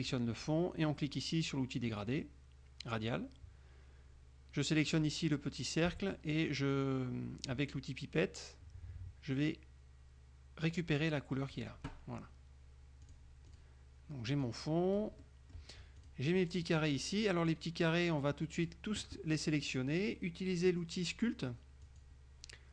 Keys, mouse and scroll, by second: 1.9 click, 5.0 click, 11.6 click, 13.2 click, 13.6 click, 14.5 click, 15.3 middle click, 16.1 click, 17.6-19.0 drag, 22.0 click.